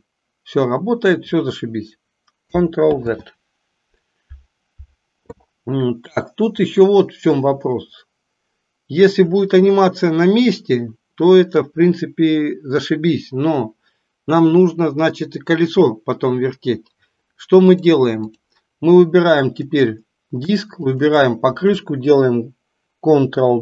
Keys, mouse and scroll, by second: 2.9 ctrl+z, 17.7-18.4 drag, 20.8 shift+click.